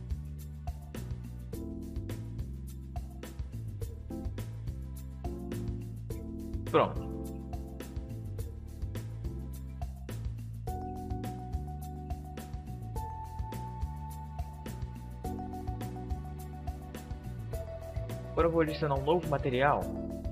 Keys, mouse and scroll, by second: 4.4-6.4 drag, 6.4 alt+s, 13.8-15.7 drag, 17.9-19.7 drag.